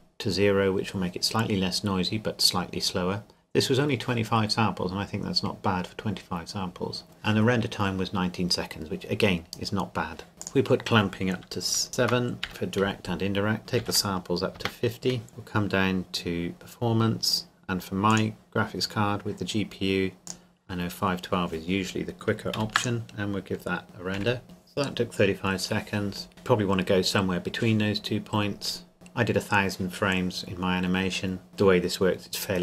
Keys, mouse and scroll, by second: 4.3 scroll up 1, 5.9-6.3 scroll down 1, 10.4 click, 11.9 KP_7, 12.0 Tab, 12.5 KP_Enter, 13.6 click, 13.8 KP_5, 13.9 KP_0, 14.6 KP_Enter, 15.3-15.9 scroll down 1, 16.5 click, 16.9-18.1 scroll down 1, 18.1 click, 18.6-20.3 scroll down 1, 20.3 click, 22.5 ctrl+s, 22.8 click, 24.2 F12, 28.7-29.7 scroll up 1, 30.4-30.9 scroll down 1.